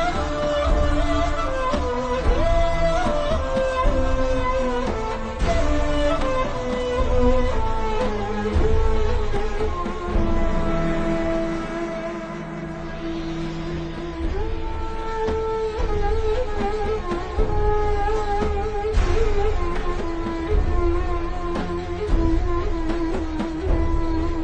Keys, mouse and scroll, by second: 1.2-1.7 alt+shift+scroll up 2, 1.7 click, 4.7 click, 8.4 right click, 12.2 shift+click, 12.8-13.1 alt+shift+scroll up 2, 13.2 shift+click, 15.9 click, 16.3 click, 17.9 scroll down 1, 18.1 click, 19.9-20.5 alt+shift+scroll down 2, 21.3 click, 22.8 a, 23.1 click.